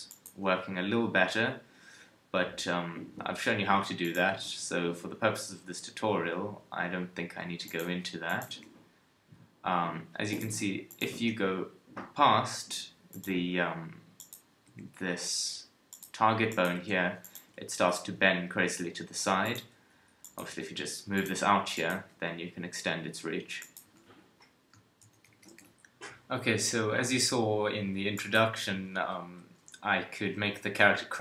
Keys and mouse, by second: 0.1 click, 0.5 r, 4.1 click, 4.3 g, 7.8 r, 8.5 g, 10.5 r, 11.1 g, 14.7 g, 16.7 g, 17.3 KP_1, 17.9 g, 19.6 KP_3, 20.5 g, 22.0 g, 23.9 a, 24.0 a, 25.0 alt+r, 25.3 alt+g, 25.6 a, 29.2 KP_3, 30.5 g.